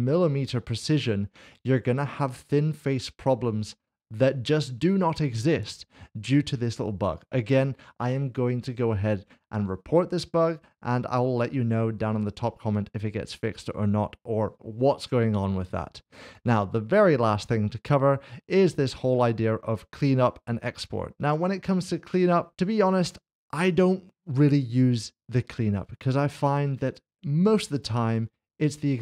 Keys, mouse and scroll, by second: 0.3 shift+middle click, 1.0 middle click, 19.1 click, 21.7 click, 23.6 click, 23.8 middle click.